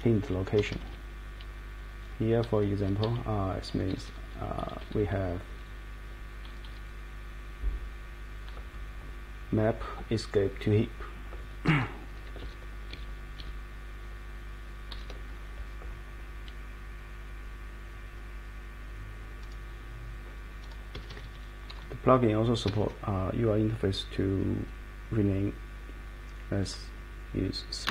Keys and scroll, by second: 0.5 Escape, 0.7 Escape, 0.8 Escape, 2.8 Page_Up, 3.0 Page_Down, 3.7 End, 3.9 End, 4.0 Right, 4.2 Right, 4.6 Left, 4.8 Left, 5.0 Left, 5.7 Left, 6.4 Right, 6.6 Right, 10.4 Up, 12.4 super+Left, 12.9 super+Left, 13.4 super+Left, 14.9 super+Right, 20.9 Escape, 21.2 Escape, 22.6 Escape, 22.8 Escape, 27.8-27.9 typing.